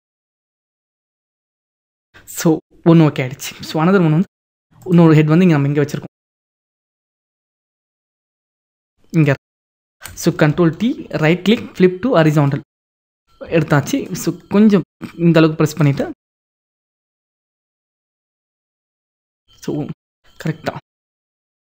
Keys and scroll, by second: 0.5 ctrl+-, 10.6 ctrl+t.